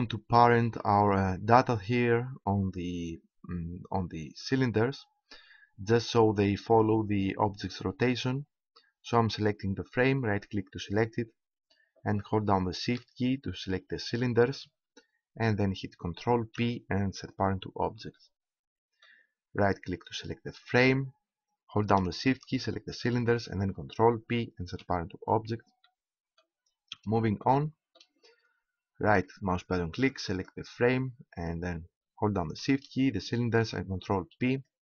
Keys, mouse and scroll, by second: 4.4-7.3 right drag, 9.9-12.3 right drag, 12.3-13.9 middle drag, 14.1-15.9 right drag, 16.4 ctrl+p, 18.9 middle click, 24.6 ctrl+p, 29.9-32.4 right drag, 32.5-34.2 right drag, 34.2 ctrl+p.